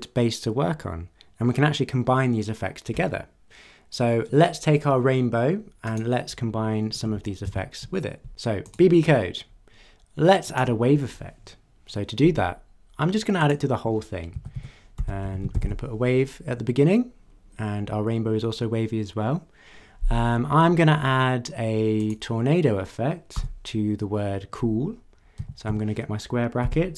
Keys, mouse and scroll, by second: 5.8 click, 7.4 ctrl+d, 8.6 click, 9.0-9.3 scroll down 1, 10.4 click, 13.4 click, 14.3-16.1 typing, 22.0 click, 23.3 Left, 25.4 [, 25.6 ], 26.6 Left.